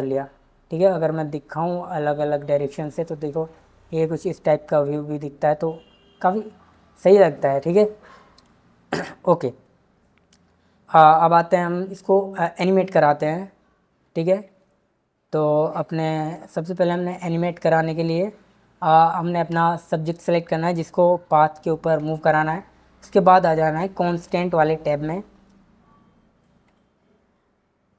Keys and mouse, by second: 9.3-9.8 drag, 11.1 z, 19.5 click, 23.6 click, 26.7 click.